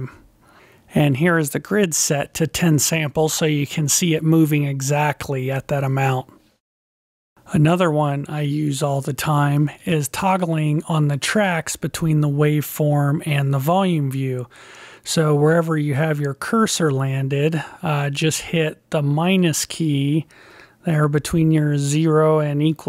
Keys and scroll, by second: 1.3 ., 5.9 ,.